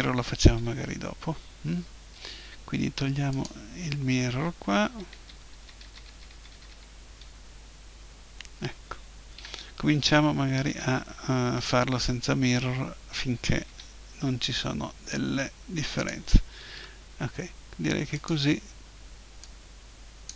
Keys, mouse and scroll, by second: 3.3-4.8 drag, 4.8 ctrl+z, 5.2 ctrl+z, 5.5 ctrl+z, 5.8 ctrl+z, 6.1 ctrl+z, 6.3 ctrl+z, 6.6 ctrl+z, 6.7 ctrl+z, 9.4 a, 10.7 a, 12.0 shift+d, 16.1-17.8 drag, 16.8 s, 18.3-20.3 drag.